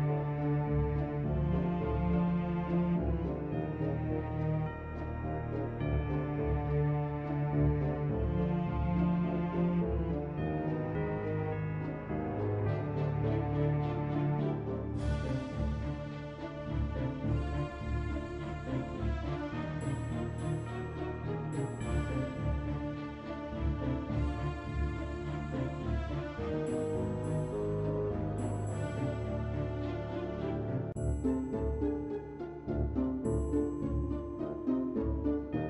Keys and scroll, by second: 16.4 ctrl+Delete.